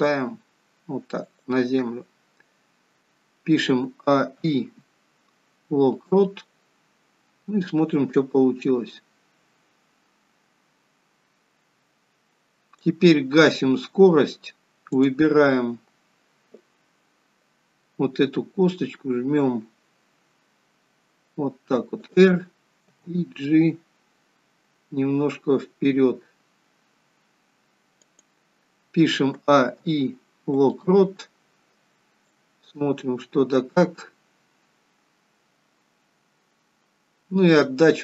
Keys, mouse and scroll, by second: 4.0 a, 4.3 i, 8.1 click, 14.9 click, 18.3 r, 23.0 g, 29.9 a, 29.9 i, 32.4 click.